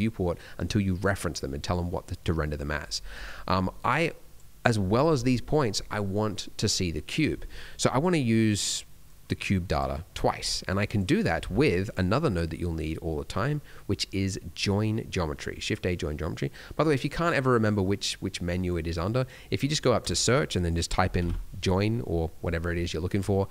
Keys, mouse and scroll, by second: 3.8 click, 9.0 click, 10.6 click, 11.3 shift+a.